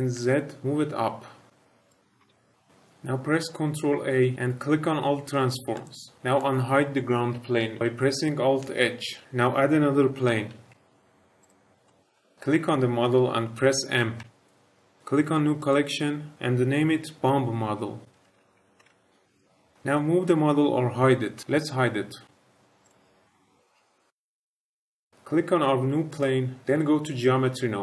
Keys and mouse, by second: 0.1 z, 1.8 click, 2.1 h, 4.3 ctrl+a, 9.1 alt+h, 10.4 shift+a, 11.8 middle drag, 14.1 m, 22.8 click, 24.4 shift+middle click, 24.5 middle click, 26.0 click.